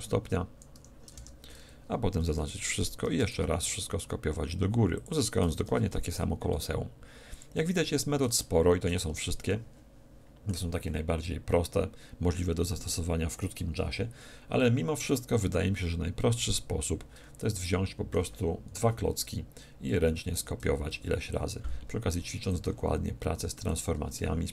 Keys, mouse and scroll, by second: 2.2 a, 2.4 a, 5.0-6.6 drag, 7.4-9.4 shift+drag, 8.4-12.6 shift+middle drag, 9.0 a, 17.6-19.5 middle drag, 19.9 a, 20.9 a, 21.2 z, 22.3 b, 23.6 x, 24.2-24.5 middle drag.